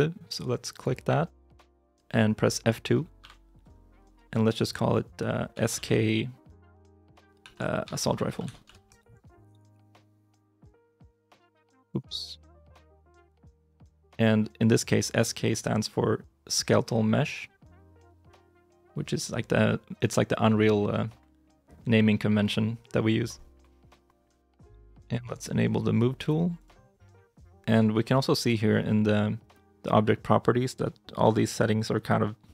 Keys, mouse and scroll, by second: 0.6 right click, 27.8 shift+middle click.